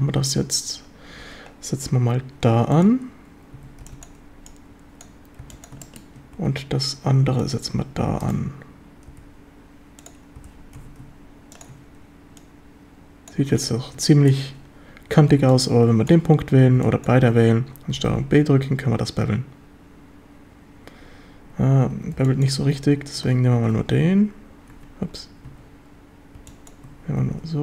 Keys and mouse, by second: 1.2 e, 2.7 drag, 3.6 a, 3.8 b, 4.5 click, 5.4 b, 5.8 shift+middle click, 6.4 e, 7.5 click, 9.1 g, 10.0 click, 10.4 g, 10.8 x, 11.6 ctrl+click, 12.4 click, 13.6 a, 14.1 shift+middle drag, 14.3 click, 15.4 b, 16.8 b, 18.0 ctrl+b, 21.5 Escape, 21.9 a, 22.2 b, 23.6 ctrl+shift+b, 24.8 Escape, 25.5 a, 26.4 b, 27.2 ctrl+b.